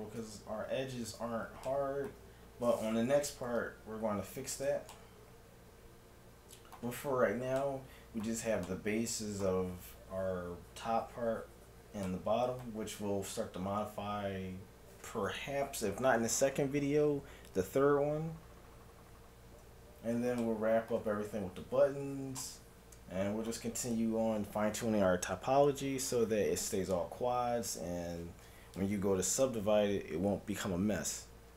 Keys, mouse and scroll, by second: 0.2 Tab, 1.7-3.4 middle drag, 4.1 ctrl+0, 5.0-6.8 middle drag, 7.7-10.4 middle drag, 12.1-13.8 middle drag, 20.6-24.3 middle drag.